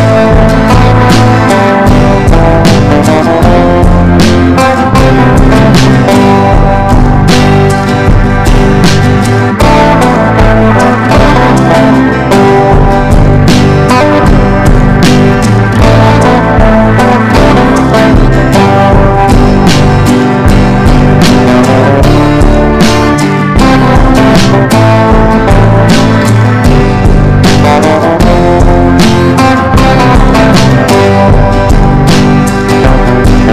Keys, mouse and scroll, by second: 0.4-2.1 drag, 4.6 F4, 5.1-21.6 drag, 22.1 ctrl+g, 23.9 click, 25.5 ctrl+d, 25.7 click, 27.2 ctrl+d, 27.4 ctrl+d, 28.2 click, 28.8 shift+click, 29.0 shift+click, 29.3 shift+click, 30.2 click, 31.1 ctrl+g, 31.8 click, 32.8 Down, 33.1 Down.